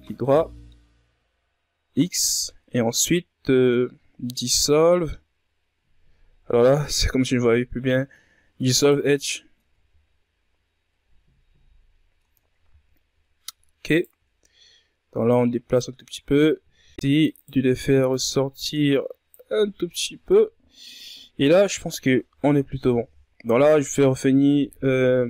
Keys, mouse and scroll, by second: 7.4 x, 8.0 Tab, 8.4-9.4 scroll down 7, 9.4-9.9 scroll up 6, 9.9-10.4 ctrl+scroll down 5, 10.4 scroll up 1, 10.6 Tab, 12.3 alt+right click, 13.7 click, 14.5 ctrl+scroll down 2, 14.8-15.3 shift+scroll up 3, 15.5 right click, 15.6 z, 16.8 right click, 16.9 c, 18.4 z, 18.9 click, 20.2-21.0 scroll down 10, 21.0 Tab, 21.9-22.3 scroll down 2, 23.4 KP_Divide.